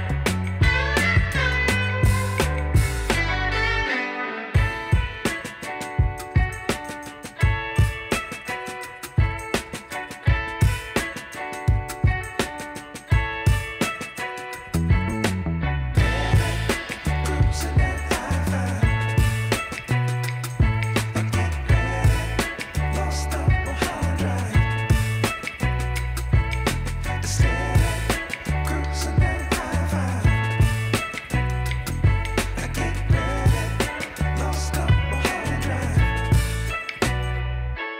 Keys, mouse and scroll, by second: 3.9-4.4 alt+scroll up 1, 18.6 alt+scroll down 1, 19.6 double click, 20.6-21.2 alt+scroll up 1, 21.2 double click, 21.5 shift+click, 24.8 shift+click, 28.9 shift+click, 31.0 double click, 32.4 shift+click, 35.9 shift+click.